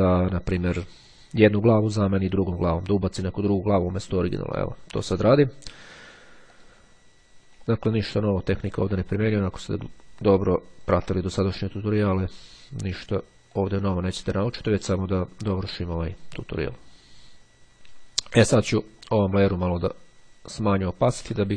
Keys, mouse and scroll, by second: 6.6 click, 8.0-11.5 ctrl+drag, 11.7 click, 13.7 click, 14.5-19.1 drag, 19.9-21.5 drag.